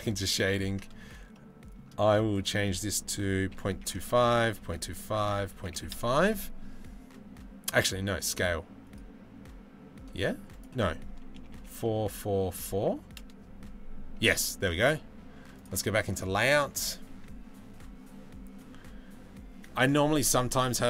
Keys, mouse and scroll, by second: 0.0-0.9 middle drag, 1.0-20.8 middle drag.